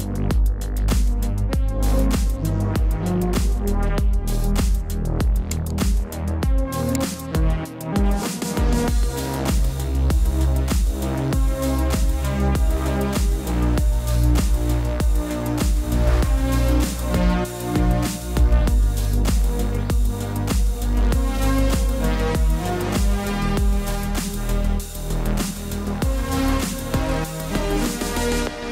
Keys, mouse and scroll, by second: 5.6 click, 12.0 click, 20.9 click, 27.6 KP_5, 28.6 BackSpace.